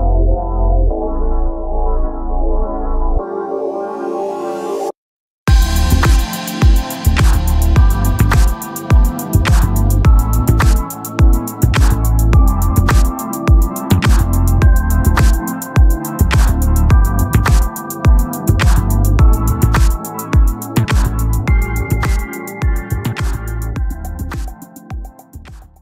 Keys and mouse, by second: 1.3 click, 4.4 click, 6.6 click, 12.5 ctrl+-, 13.3 ctrl+=, 15.8 click, 22.0 click.